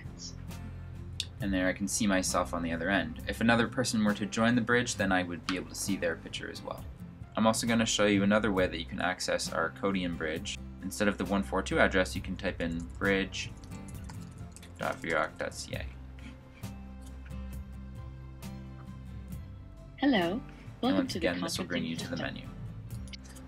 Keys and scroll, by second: 10.2-15.8 typing.